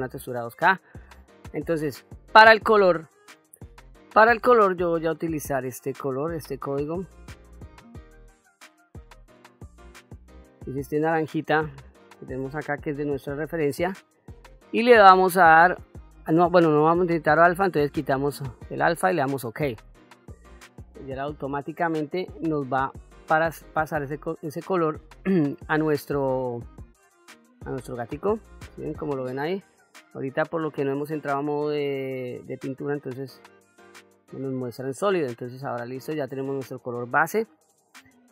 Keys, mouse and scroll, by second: 23.9 click, 26.6-27.3 middle drag, 28.4 click, 29.5 click, 31.0-31.7 shift+middle drag, 32.1-32.6 middle drag, 33.8 click, 36.2-36.9 drag.